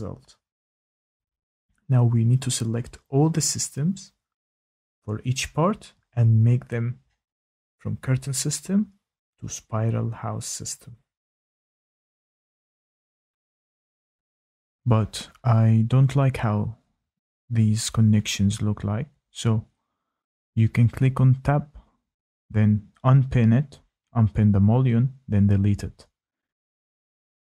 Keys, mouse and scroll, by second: 2.8 click, 3.3 click, 5.9 ctrl+click, 7.0 click, 8.0 click, 8.2 ctrl+click, 8.8 ctrl+click, 10.2 click, 13.3 click, 16.3-18.5 scroll, 18.7 Tab, 19.3 click, 22.8 click, 24.0 Delete, 24.7 scroll, 25.1 middle click, 25.9 Tab, 26.2 shift+middle click.